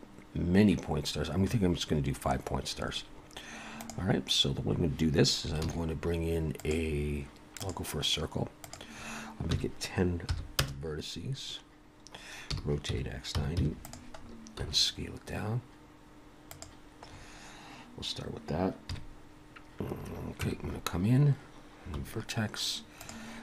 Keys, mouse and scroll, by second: 5.7 shift+a, 8.7 click, 11.8-12.5 scroll down 1, 12.5 r, 14.2-14.6 scroll down 3, 14.6 s, 17.1-17.7 scroll up 3, 18.9 KP_Decimal, 19.9 scroll down 1, 20.2 KP_Decimal, 20.4 Tab, 22.0 1, 23.0 click.